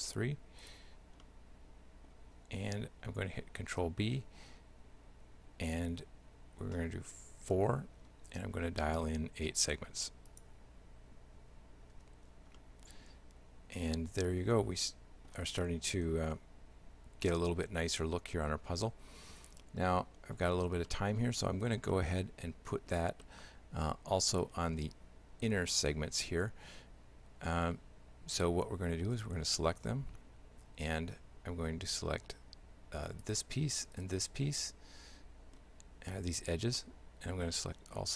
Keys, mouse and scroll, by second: 0.6 right click, 1.3 shift+middle click, 4.0 ctrl+b, 12.0 Tab, 12.6 shift+middle click, 15.7 middle click, 16.4 shift+middle click, 20.9 middle click, 22.0 shift+middle click, 23.3 middle click, 29.2 right click, 30.7 Tab, 33.1 right click, 34.0 shift+right click, 34.6 shift+middle click, 36.3 shift+right click, 36.8 shift+middle click.